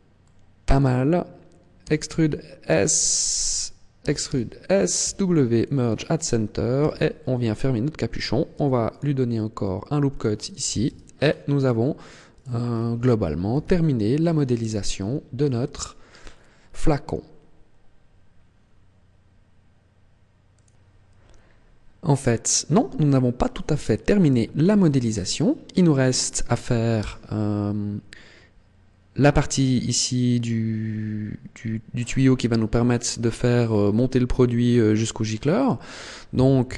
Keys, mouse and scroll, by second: 0.1 middle click, 1.7 e, 3.5 click, 3.9 e, 4.8 click, 5.0 w, 6.6 z, 8.5 ctrl+r, 10.1 click, 10.7 Tab, 10.9 scroll down 5, 12.2 right click, 12.5 scroll down 2, 13.4 KP_1, 14.0-14.3 scroll down 2, 14.8 shift+middle click, 15.6-15.9 scroll up 4, 16.1 scroll down 1, 16.9 scroll up 1, 26.8 h.